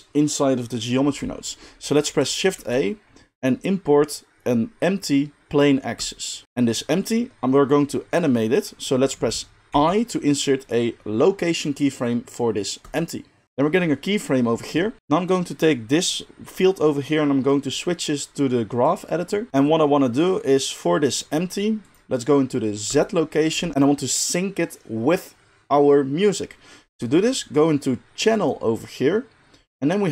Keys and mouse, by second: 2.5 shift+a, 3.3-5.7 middle drag, 8.5-13.4 middle drag, 9.7 i, 13.4-21.9 drag, 19.5 n, 21.9-22.8 middle drag, 22.8 click, 23.0-28.4 middle drag, 28.4-30.1 drag.